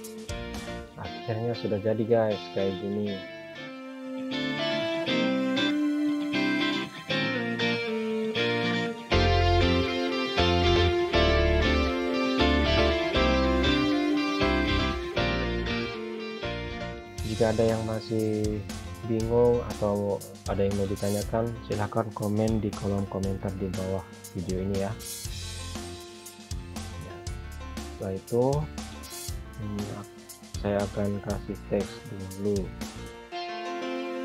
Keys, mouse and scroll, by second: 0.3 click, 1.0 right click, 3.4 click, 9.5 click, 15.9 shift+click, 26.9 click, 31.0-31.4 scroll up 1, 32.1 click, 32.8 scroll up 1, 34.1 scroll down 1.